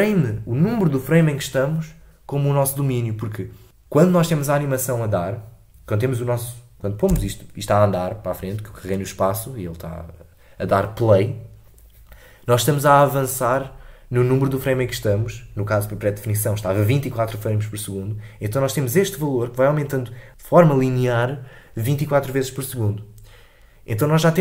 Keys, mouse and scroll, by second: 7.0 space.